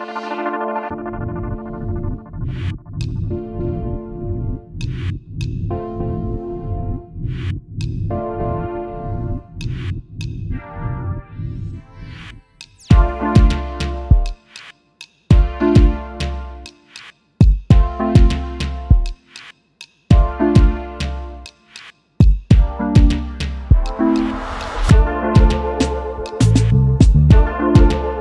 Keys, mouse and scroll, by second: 0.0 ctrl+scroll up 2, 1.5 click, 3.1 ctrl+d, 4.5-6.3 ctrl+drag, 8.1-11.7 shift+drag, 12.1-14.7 ctrl+shift+drag, 15.7 ctrl+d, 17.7-19.2 ctrl+shift+drag, 19.6-21.6 ctrl+shift+drag, 22.3-23.8 ctrl+shift+drag, 26.5 space, 27.3 ctrl+scroll up 2, 27.9 ctrl+space.